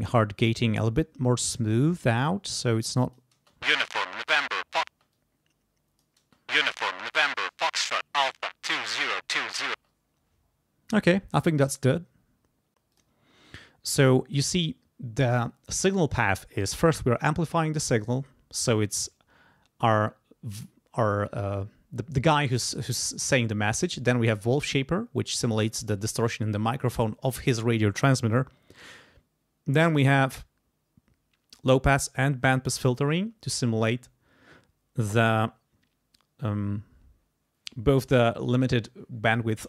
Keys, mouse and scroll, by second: 2.4 click, 3.4 space, 4.9 space, 5.1 click, 6.2 space, 9.8 space, 12.9 click.